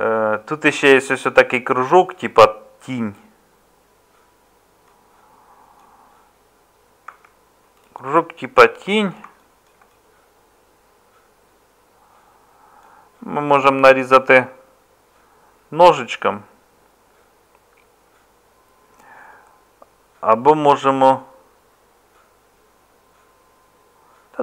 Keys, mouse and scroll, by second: 7.1 Tab.